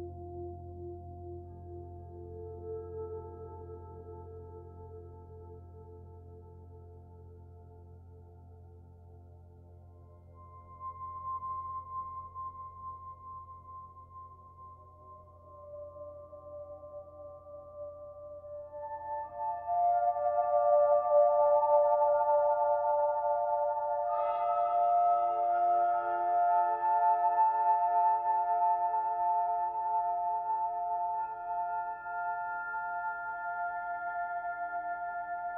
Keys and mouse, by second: 0.8 click, 3.2 typing, 3.5 Delete, 4.1 click, 4.4-5.0 typing, 7.3 shift+click, 8.1 click, 8.1 typing, 8.5-11.6 drag, 10.4 typing, 11.5 typing, 13.0 space, 13.4-16.1 drag, 20.5 click, 22.2 ctrl+s, 22.8-23.9 ctrl+alt+drag, 27.1-30.0 drag, 33.4-35.5 alt+drag.